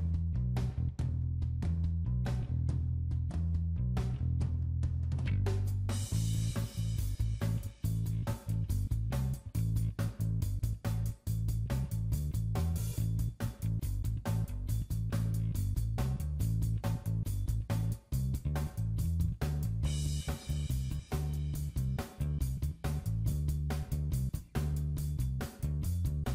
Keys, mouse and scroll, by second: 0.3 click, 0.3 scroll up 1, 3.2 middle click, 4.8 scroll up 3, 5.4 right click, 6.7 shift+middle click, 9.0 click, 9.5 middle click, 10.4 click, 10.9-11.3 scroll down 2, 11.1 middle click, 12.2-13.0 scroll down 6, 13.0 click, 13.8 middle click, 14.1 scroll up 4, 14.5 click, 15.3 middle click, 15.8 middle click, 16.8 scroll down 4, 17.4 middle click, 17.4 scroll down 5, 17.8-18.8 scroll up 9, 18.8 click, 20.2 shift+click, 23.4 shift+click.